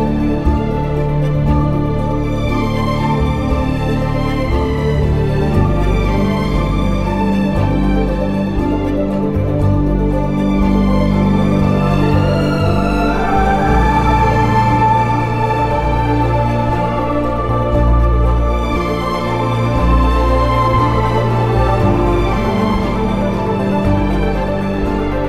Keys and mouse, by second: 11.2 KP_3.